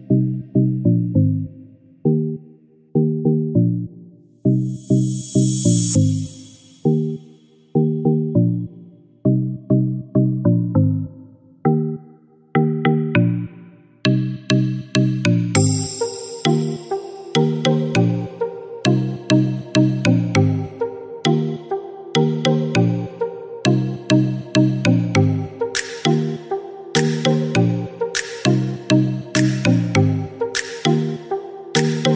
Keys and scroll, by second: 7.1-7.9 typing, 11.6 typing.